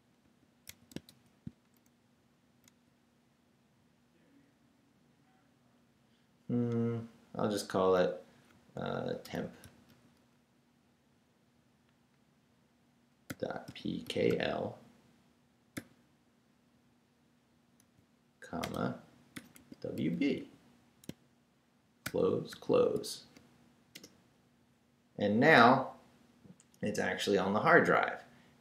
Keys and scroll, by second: 0.0-1.6 typing, 2.6 ', 9.1-10.4 typing, 13.0-15.7 typing, 17.8-22.0 typing, 23.9 shift+Return.